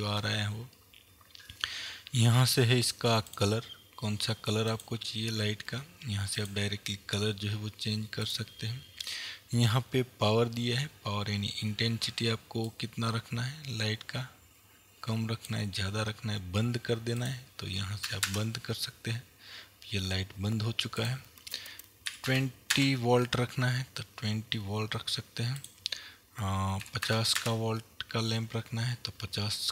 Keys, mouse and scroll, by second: 0.5-2.9 scroll up 2, 2.9-3.4 scroll up 1, 3.4 click, 8.3 click, 12.7-29.7 drag, 18.8 KP_Enter, 23.4 KP_Enter, 28.0 KP_Enter.